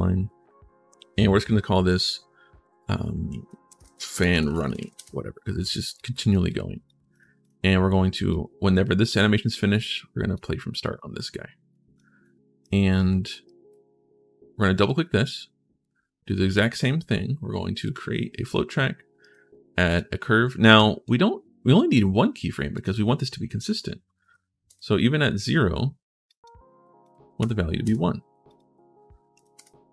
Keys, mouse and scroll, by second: 3.1-5.1 typing, 5.7 click, 6.3 click, 6.9 click, 7.2 click, 8.1-10.1 drag, 10.6-11.7 drag, 12.0 right click, 12.7 right click, 13.2 right click, 14.5 click, 14.6 click, 17.6 click, 19.0 right click, 19.7 click, 20.6 click, 22.5 click, 25.1 click, 26.0 click, 26.8 click, 27.2 1, 28.2 click.